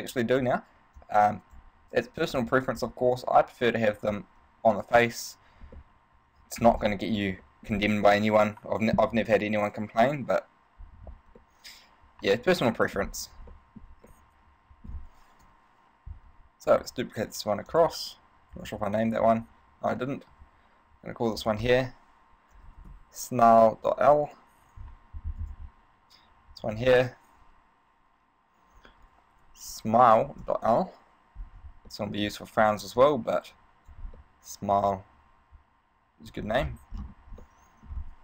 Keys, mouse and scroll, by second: 1.2 click, 3.7 t, 5.3 n, 6.0 middle click, 6.8-7.5 scroll up 5, 7.6 middle click, 11.6 middle click, 13.2-13.6 scroll up 4, 13.7 shift+middle click, 14.3 middle click, 15.6 KP_1, 16.8 shift+d, 18.0 click, 18.7 right click, 20.5 n, 21.6 click, 25.6 right click, 26.8 click, 32.0 middle click, 33.2 click, 34.5 middle click, 36.8-37.6 scroll down 7, 37.6 middle click.